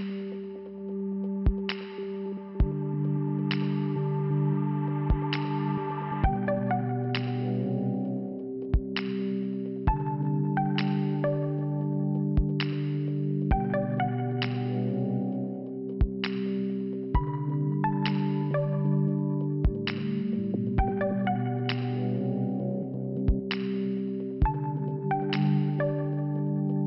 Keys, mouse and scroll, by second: 4.6 right click, 4.8 right click, 4.9 right click, 5.0 right click, 5.6 click, 5.8 click, 7.8 click, 7.9 click, 10.7 click, 11.3 click, 13.1 click, 14.3 scroll up 1, 15.7 click, 15.7 click, 16.8 click, 20.2 click, 20.4 click, 21.8 click, 22.5 click, 24.6 click, 24.7 click, 25.9 click, 26.0 click, 26.4 click.